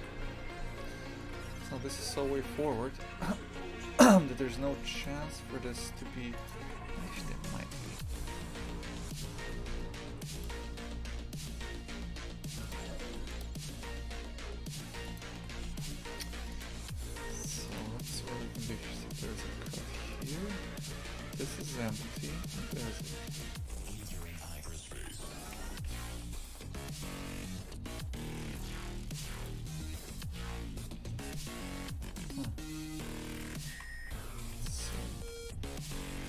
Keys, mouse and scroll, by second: 6.5 click, 6.6 shift+f, 8.0 a, 9.1 right click, 9.4 Tab, 9.7 a, 10.1 ctrl+r, 12.8 a, 13.0 ctrl+r, 15.3 shift+f, 16.7 a, 17.2 ctrl+r, 22.4 ctrl+r, 24.1 alt+shift+right click, 24.3 ctrl+x, 25.9 s, 30.0 3, 33.2 right click, 33.7 shift+f, 35.2 e.